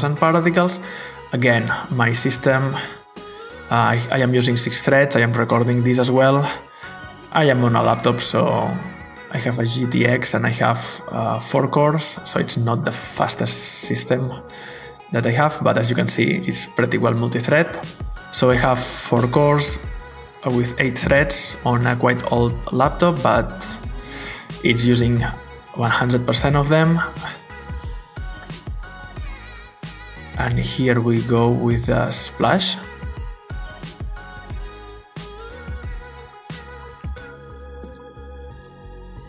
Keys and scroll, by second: 37.7-38.0 typing, 38.3 Return.